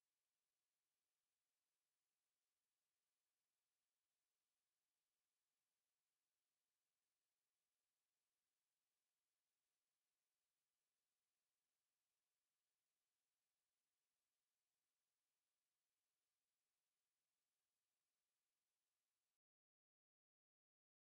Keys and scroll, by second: 1.0 space, 2.5 space, 4.5 alt+e, 12.3 Right, 19.5 alt+e.